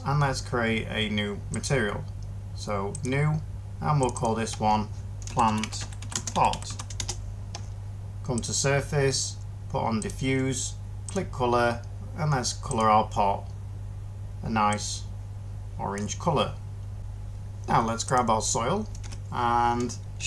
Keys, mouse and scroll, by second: 5.2-6.6 typing, 6.9 Return, 18.9 1.